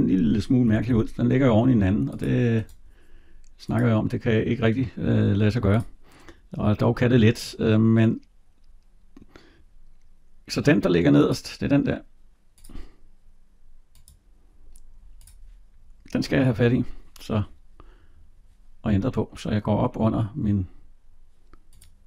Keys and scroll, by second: 0.6 Escape.